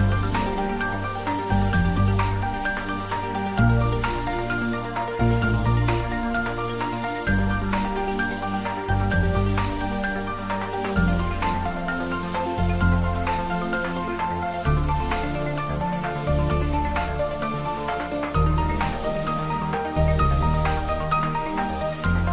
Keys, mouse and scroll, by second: 0.0 Tab, 1.0 click, 3.2 3, 4.7 3, 5.1 click, 5.6 shift+click, 7.4 middle click, 8.3 e, 11.0 click, 11.3 ctrl+middle click, 11.7 shift+middle click, 12.1 Tab, 12.3 s, 13.2 click, 14.6 ctrl+middle click, 15.1 shift+z, 15.4 middle click, 16.1 click, 17.1 shift+z, 17.4 ctrl+middle click, 17.7 shift+z, 18.0 shift+middle click, 18.8 g, 20.4 click, 20.5 ctrl+middle click, 21.1-22.3 shift+middle drag.